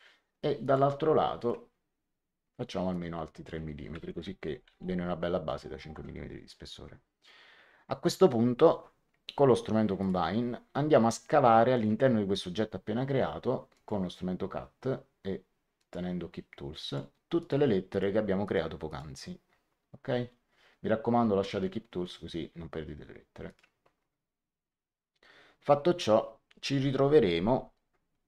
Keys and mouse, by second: 0.5 click, 2.8 click, 4.1 KP_3, 5.8 Return, 5.8 KP_Enter, 9.9 click, 11.7 click, 13.7 click, 15.7 click, 16.8 click, 23.4 click.